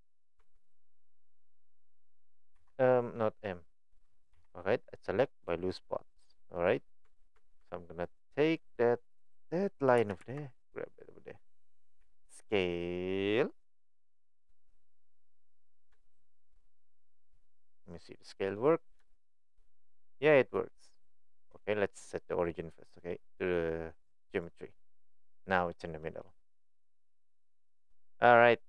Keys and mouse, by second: 2.6 m, 4.3 p, 7.0 Tab, 7.4 Tab, 7.6 Tab, 8.6 click, 9.1 click, 10.0 g, 12.0 s, 15.0 middle click, 15.9-16.5 shift+middle drag, 16.6-18.5 middle drag, 19.7-20.5 middle drag, 25.4 middle click, 26.0 middle click, 26.9-28.3 middle drag.